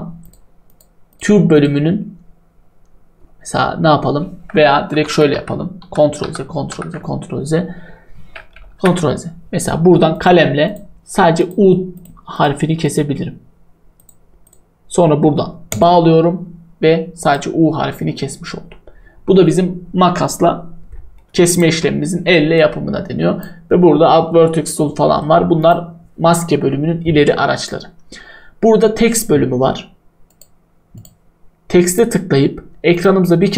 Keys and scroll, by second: 4.8 ctrl+z, 21.7 Delete.